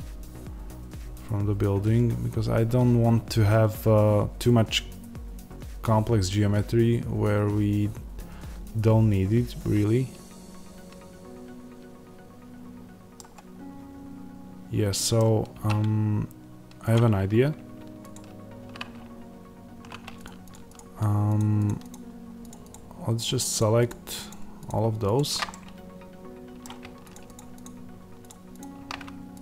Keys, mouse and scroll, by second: 15.4 3, 16.8 click, 18.0 ctrl+click, 21.7-25.4 shift+drag, 25.4-27.0 middle drag, 27.4-29.3 shift+drag.